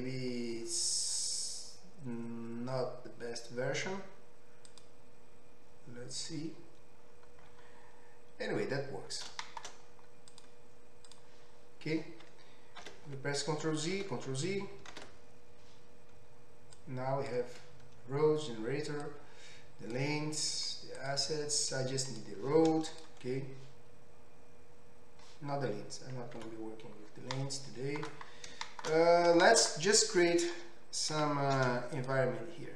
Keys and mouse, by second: 4.7 click, 4.8-10.4 middle drag, 10.4 drag, 10.5-11.1 middle drag, 11.1 click, 11.3-15.5 middle drag, 13.2 ctrl+z, 14.4 ctrl+z, 15.5 ctrl+z, 16.8-21.1 drag, 22.1 click, 22.9 click, 26.5 Tab, 27.1-32.7 middle drag, 31.1 q.